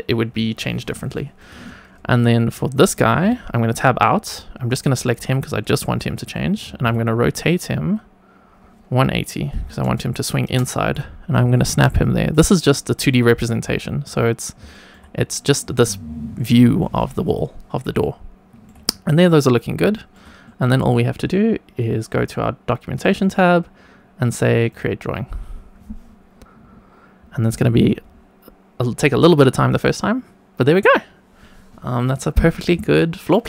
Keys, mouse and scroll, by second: 1.1 shift+middle click, 2.1-2.8 scroll up 1, 3.2 Tab, 4.2 click, 4.8 shift+middle drag, 6.6 r, 6.8 z, 9.5 KP_1, 9.6 KP_8, 10.0 KP_0, 10.4 Return, 11.4 g, 12.2 click, 13.4 scroll down 1, 13.7 shift+middle drag, 14.7 shift+middle click, 16.7 shift+middle click, 17.2 click, 17.5 scroll down 1, 17.9-18.6 shift+middle drag, 18.8 scroll up 1, 19.5 scroll down 1, 19.9 shift+middle click, 20.5 click, 22.1 click, 24.7-29.1 drag.